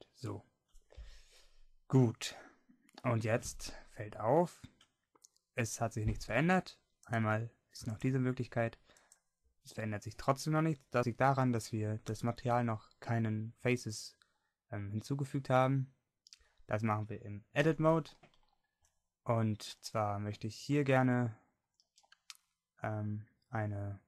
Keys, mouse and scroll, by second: 2.3-3.5 middle drag, 10.9 Tab, 10.9 a, 14.6-17.7 middle drag, 17.7 Tab, 18.7 middle click.